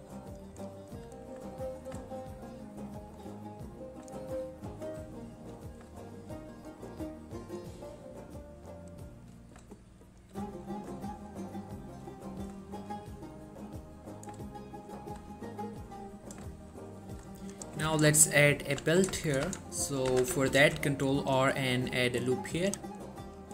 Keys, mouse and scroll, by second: 0.5 click, 0.8-2.1 scroll down 1, 2.2-3.5 shift+middle drag, 3.6 scroll up 1, 4.3 shift+middle click, 4.6-5.0 shift+scroll up 2, 5.9 scroll down 1, 6.2-6.8 shift+middle click, 7.2-7.9 shift+middle click, 8.2-8.8 shift+middle drag, 10.0-10.5 shift+middle click, 11.2-11.9 shift+middle drag, 14.7-15.3 shift+middle drag, 17.3-17.7 shift+scroll up 2, 17.7 click, 18.0 Tab, 18.3 shift+middle click, 18.5-19.1 shift+scroll up 2, 19.3 shift+middle click, 19.5 shift+z, 20.2 z, 20.7 ctrl+r, 21.0 click, 23.4 scroll down 1.